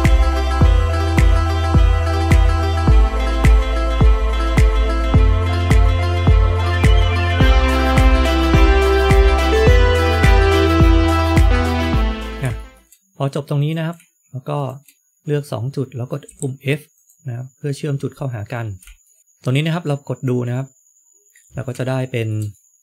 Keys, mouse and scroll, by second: 1.5 ctrl+right click, 1.6 scroll down 4, 1.7 shift+middle click, 1.9-2.2 scroll up 2, 3.9 ctrl+right click, 4.3 ctrl+right click, 4.4 shift+middle click, 5.1 ctrl+right click, 5.4 shift+middle click, 5.8 ctrl+right click, 6.2-8.2 ctrl+right click, 8.2 shift+middle click, 8.6 ctrl+right click, 9.6 ctrl+right click, 9.6 shift+middle click, 10.2 ctrl+right click, 10.4 ctrl+right click, 10.6 shift+middle click, 11.0 ctrl+right click, 11.3 ctrl+right click, 11.8 shift+middle click, 11.9-12.3 scroll up 5, 12.5 shift+middle click, 13.5 click, 14.5 shift+click, 16.2 f, 16.9 click, 17.8-18.1 scroll down 4, 19.0 shift+middle click, 19.0-19.7 scroll down 5, 19.2-19.7 scroll up 3, 19.8 middle click, 21.6 scroll down 2, 21.8 shift+middle click.